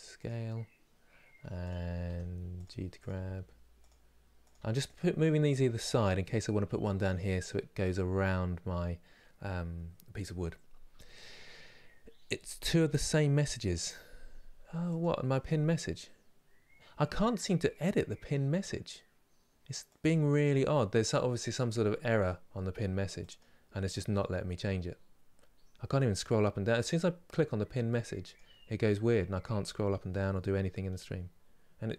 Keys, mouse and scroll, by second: 1.8 g, 2.7 click, 2.8 g, 4.2 click, 4.3 g.